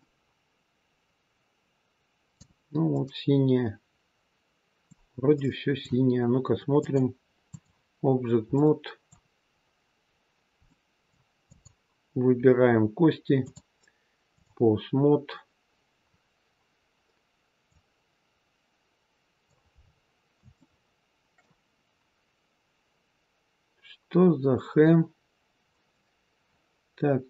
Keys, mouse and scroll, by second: 2.8 middle click, 5.2 middle click, 6.7 click, 8.0-8.5 scroll down 3, 8.5 middle click, 9.5-9.8 scroll down 1, 10.6 middle click, 11.3 click, 13.4 click, 16.0-16.4 scroll down 2, 17.6 click, 19.7-20.6 scroll up 5, 20.6 shift+middle click, 23.2-24.0 scroll up 2, 24.0-26.6 scroll down 1, 26.6-27.2 scroll down 1.